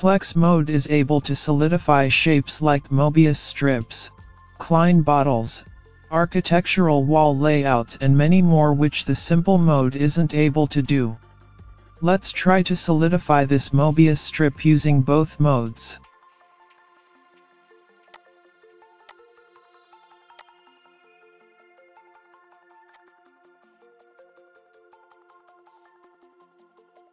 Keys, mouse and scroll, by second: 0.3 r, 17.4-17.8 scroll down 1, 18.1 click, 19.1 click, 21.7 scroll up 2, 21.9 middle click, 22.9 click, 24.7 scroll up 1, 24.8 middle click, 25.2 scroll down 4, 25.3 scroll up 4, 25.5 middle click, 26.4 scroll down 2, 26.6 scroll up 1.